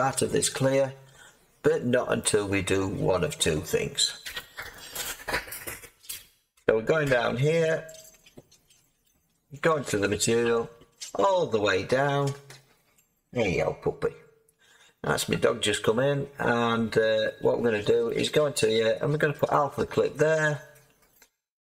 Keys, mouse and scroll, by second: 0.6-2.2 scroll up 2, 2.2-4.7 middle drag, 4.7-6.8 drag, 6.8-8.1 scroll up 7, 8.1-9.6 scroll up 3, 9.6 click, 10.0-10.7 scroll up 8, 10.7-12.6 scroll, 12.6-16.1 scroll, 18.0 click.